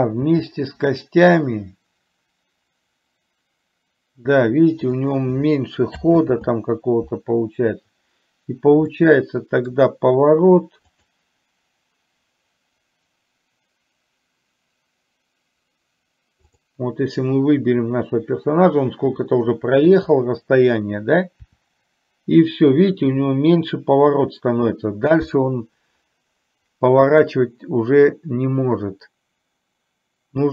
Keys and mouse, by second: 9.0 middle click, 10.9 click, 16.6 click.